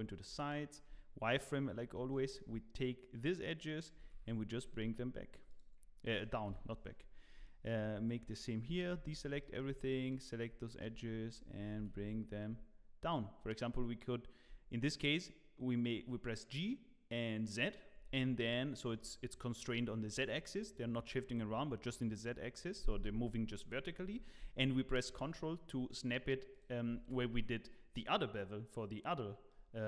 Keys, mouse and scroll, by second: 0.0-0.5 scroll up 1, 0.8 1, 1.2 click, 1.8 scroll up 2, 2.1 shift+middle click, 3.9 g, 5.8-6.5 scroll down 1, 6.5 KP_3.